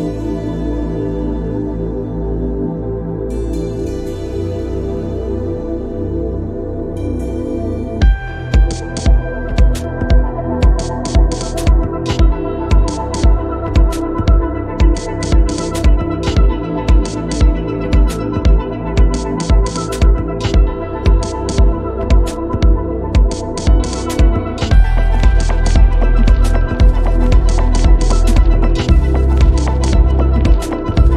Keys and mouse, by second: 6.3 click, 12.0 click, 15.2-16.4 drag, 18.0 click, 20.5 middle click, 22.1 click, 27.7 middle click, 29.8 click, 31.1 click.